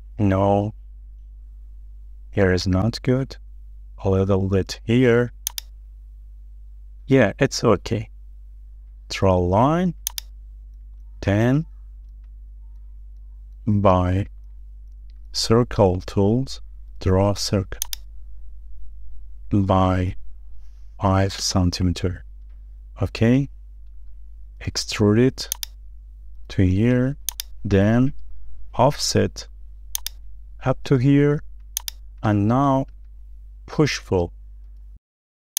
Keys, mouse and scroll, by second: 3.6 Escape, 6.3 Up, 11.0 space, 11.1 middle click, 11.6-11.9 scroll down 1, 12.0 shift+middle click, 13.0 scroll up 2, 13.1 shift+middle click, 14.1 middle click, 14.7 scroll up 1, 14.9 shift+middle click, 15.3-15.9 shift+scroll down 3, 15.9 shift+middle click, 21.6 typing, 22.4 Return, 24.9 p, 27.7 shift+middle click, 29.2 f, 32.4 shift+middle click, 35.0 Escape.